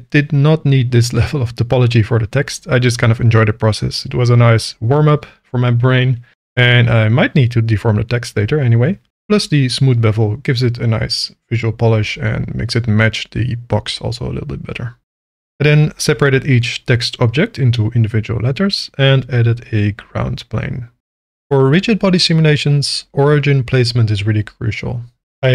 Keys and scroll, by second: 2.0 m, 4.8 Tab, 11.0 alt+a, 15.1 l, 15.3 p, 16.5 Tab, 18.2 shift+a, 18.4 s, 19.1 3, 19.4 Return, 20.7-22.0 typing, 21.0 Return, 22.4 Tab, 23.4 Tab, 24.8 Tab.